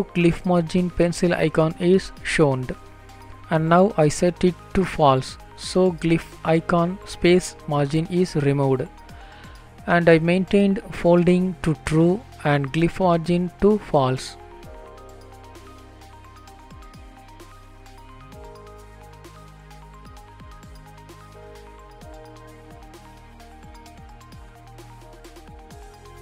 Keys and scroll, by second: 6.1 ctrl+space, 7.3 Return, 8.0 ctrl+s, 22.5 Up, 22.7 Left, 24.2 Down, 24.6 Left, 25.1 shift+End, 25.4 Delete.